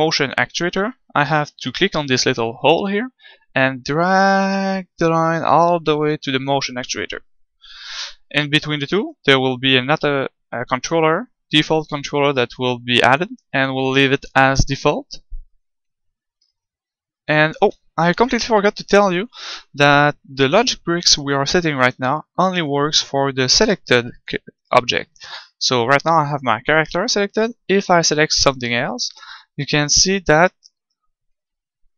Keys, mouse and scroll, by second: 18.1 middle click, 28.0-31.9 right drag.